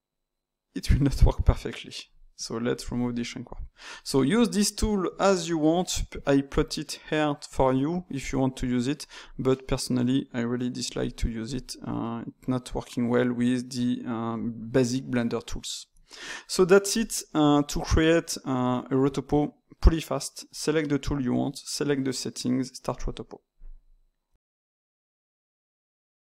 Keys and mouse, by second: 2.7 click, 3.4 middle click, 3.8 Tab, 4.3-8.2 ctrl+middle drag, 11.5 click, 11.8-14.8 middle drag, 16.8 click, 17.6 click, 20.4-23.7 drag.